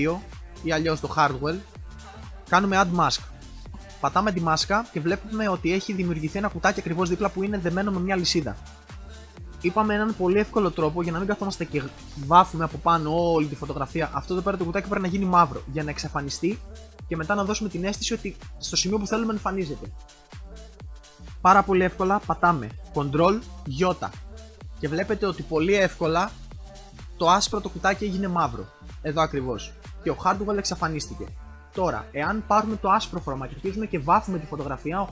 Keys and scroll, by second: 23.6 ctrl+i.